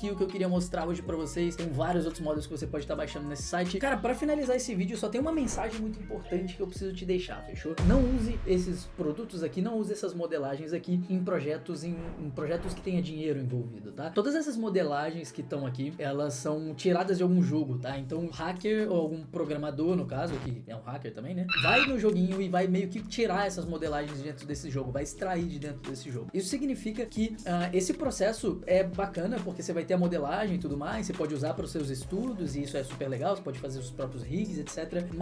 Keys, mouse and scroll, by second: 0.3-1.8 middle drag, 3.6 middle click.